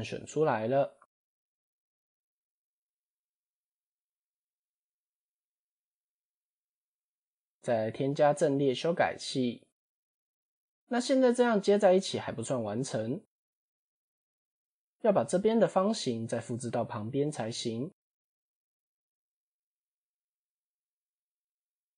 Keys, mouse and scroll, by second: 1.7 ctrl+i, 2.8 x, 5.6 Tab, 7.4 click, 9.6 click, 13.4 Tab, 13.8 scroll up 2, 14.4 shift+middle click, 15.9 click, 18.3 shift+d, 19.5-21.8 drag.